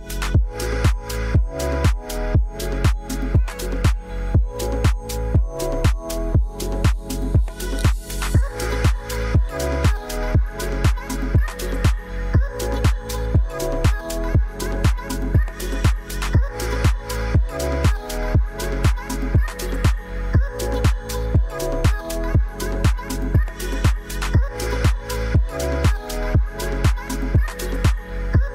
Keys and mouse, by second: 0.1 middle drag, 1.6 KP_0, 3.0 click, 6.5 ctrl+s, 6.8 click, 7.8 shift+middle click, 8.3 ctrl+s, 10.6 click, 10.9 shift+middle drag, 12.2 click, 13.9-15.8 drag, 22.5 click, 23.2 ctrl+s, 23.5 click, 24.5-27.5 drag, 24.5 BackSpace, 28.3 click.